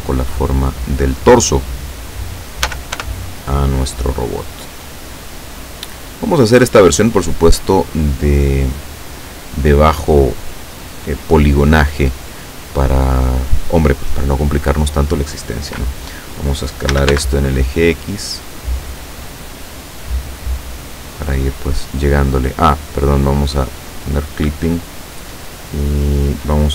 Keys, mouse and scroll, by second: 2.7 s, 3.0 y, 4.0 click, 4.8-6.8 drag, 17.0 s, 17.2 x, 21.2 click, 23.7 click.